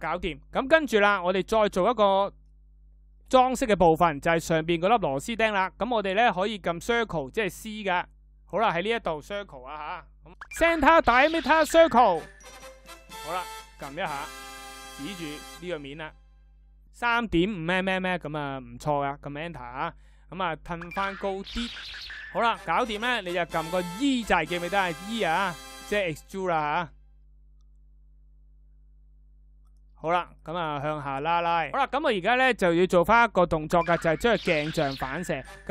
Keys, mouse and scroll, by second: 18.3 Return, 22.2 e.